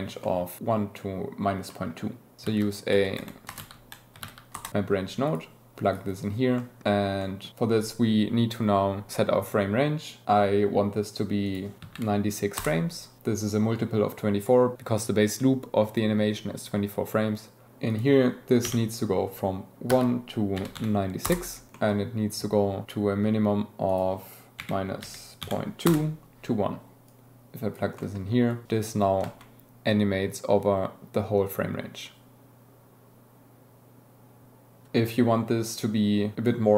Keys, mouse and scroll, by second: 0.2 middle click, 1.7 middle click, 2.5 shift+a, 5.2 click, 5.9 click, 7.2 click, 11.4-12.6 drag, 17.9-21.7 drag, 21.7 middle click, 23.9-25.9 drag, 27.0-27.7 drag, 27.9 middle click, 28.5 click, 28.6 g, 29.2 space, 35.7 click.